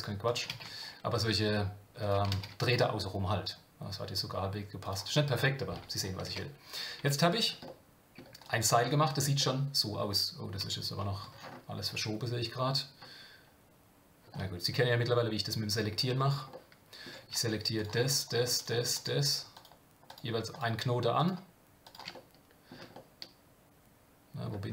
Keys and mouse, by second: 2.5 shift+d, 6.3 Tab, 7.0 Tab, 7.6 middle click, 8.4 click, 9.4 middle click, 10.6 KP_7, 14.7-15.9 middle drag, 16.5 shift+middle click, 17.7 click, 18.1 shift+click, 20.1 shift+click, 20.5 shift+click, 21.2 shift+click, 21.8 shift+click, 22.1 middle click, 22.9-24.4 shift+middle drag.